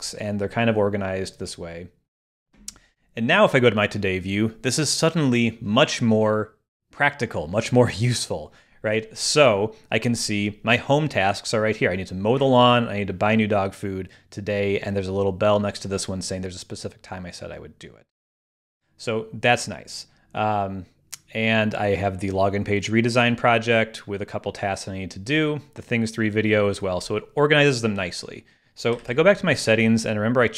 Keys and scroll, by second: 30.0 super+,.